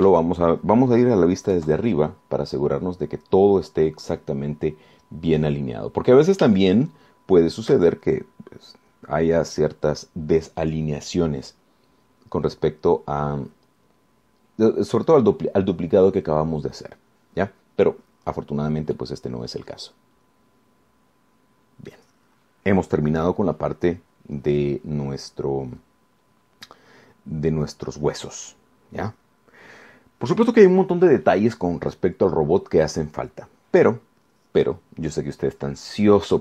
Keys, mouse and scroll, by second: 0.4 scroll down 2, 0.9 click, 2.8 KP_7, 4.0-4.6 scroll up 2, 6.5 scroll down 2, 7.8-9.0 shift+middle drag, 19.8 scroll down 2, 20.2-23.3 right drag.